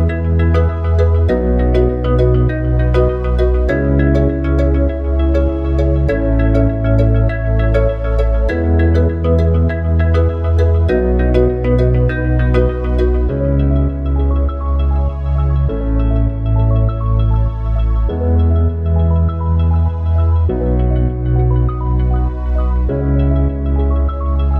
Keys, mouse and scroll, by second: 3.9 ctrl+r, 7.6 ctrl+r, 11.3 ctrl+r, 17.3 ctrl+r, 22.3 ctrl+r.